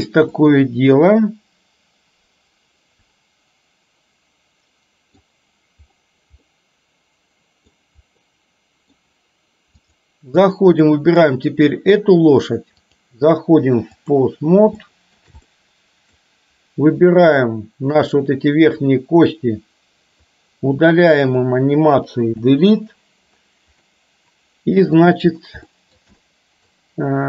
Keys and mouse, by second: 0.4-5.3 middle drag, 6.7-7.8 middle drag, 8.3 middle click, 9.8 click, 10.9 middle drag, 13.1-14.3 drag, 14.8 shift+middle click, 15.6-16.3 middle drag, 17.6-18.2 drag, 20.3-21.4 drag, 22.4 Delete, 23.9-25.2 middle drag, 25.7 shift+middle click, 26.3 middle click.